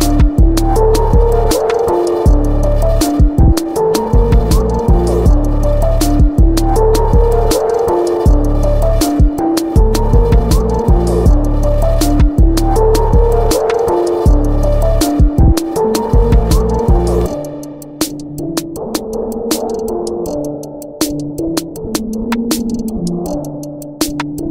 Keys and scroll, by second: 0.7 v, 2.8 b, 4.1 v, 5.6 b, 7.8 v, 13.1 b.